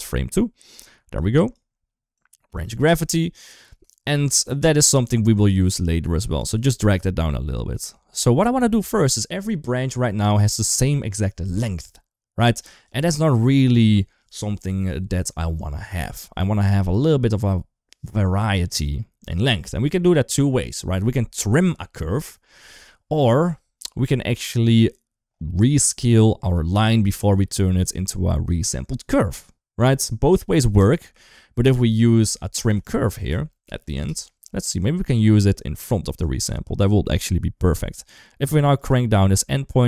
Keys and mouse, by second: 0.1 click, 0.9 click, 1.9-2.3 drag, 2.8 click, 3.0 click, 3.8 shift+middle click, 4.1 click, 4.5 g, 7.1 ctrl+s, 7.4 shift+middle click, 8.0 shift+middle click, 12.7 click, 16.2 middle click, 19.0 middle click, 27.0 middle click, 29.2-30.7 middle drag, 31.6 middle click, 32.5 shift+a, 37.6 click, 38.6-39.8 drag.